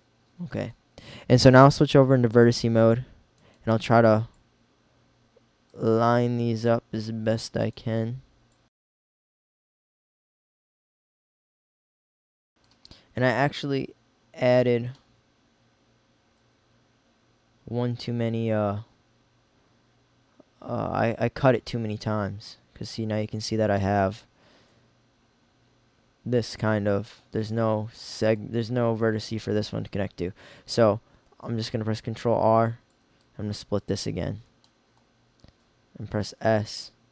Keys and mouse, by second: 3.5 middle click, 10.0 middle click, 12.6 middle click, 13.6 middle click, 16.6 middle click, 17.0 middle click, 17.4 middle click, 21.0 middle click, 23.7-25.0 middle drag, 25.1 middle click, 26.1-30.1 middle drag, 31.3 ctrl+r, 36.3 s.